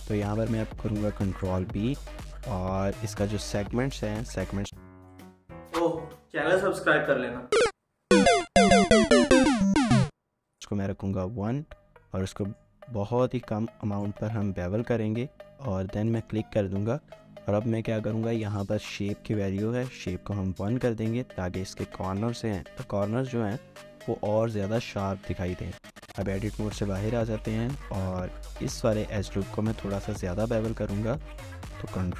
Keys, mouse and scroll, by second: 0.4 ctrl+b, 3.9 scroll down 1, 10.6-11.3 scroll down 1, 17.3-17.7 scroll up 1, 24.9 scroll down 1, 25.5 Tab, 25.9 scroll down 1, 26.1 shift+middle click, 26.6 scroll down 1, 27.4 middle click, 27.5-27.8 scroll up 1, 27.8 Tab, 28.3 shift+middle click, 28.8 alt+click, 29.3-30.6 typing, 30.0 scroll up 1, 30.3 shift+middle click, 30.6 scroll up 1.